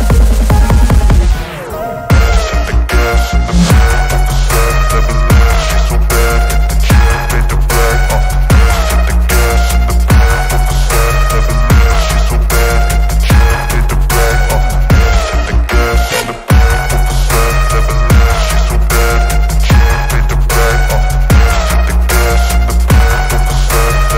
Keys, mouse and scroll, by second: 5.0 click, 6.4 s, 9.2-9.6 drag, 9.6-12.4 middle drag, 16.0 click, 17.9-22.3 drag.